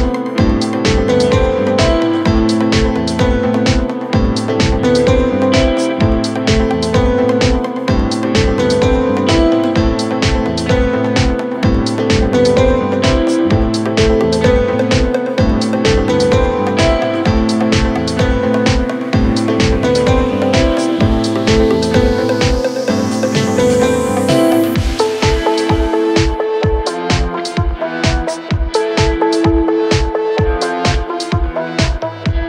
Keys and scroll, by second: 0.1 ], 3.7 ,, 11.5 ], 14.0 4, 17.0 3, 17.2 ], 20.6 4, 23.1 3, 23.5 ], 24.6 4.